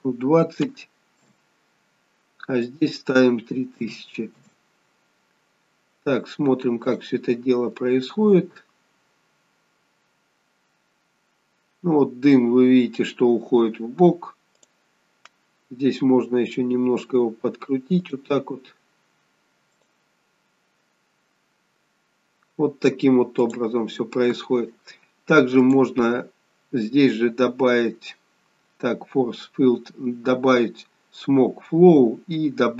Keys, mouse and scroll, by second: 2.6 click, 6.7 click, 14.6 click, 16.0 r, 19.7 click, 23.5 click, 25.5 click.